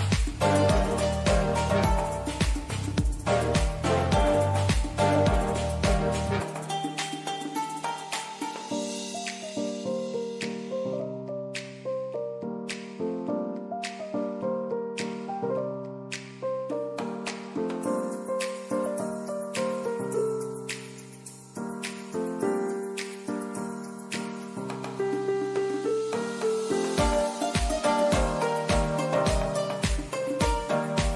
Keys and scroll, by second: 5.9 super+d.